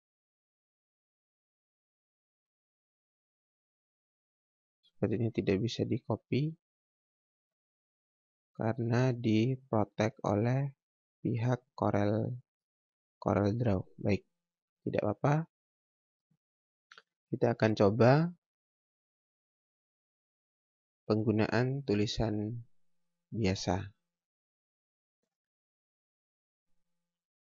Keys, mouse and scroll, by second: 2.8 right click, 4.8 click, 5.2 right click, 6.9 click, 12.4 right click, 13.8 click, 17.0 click.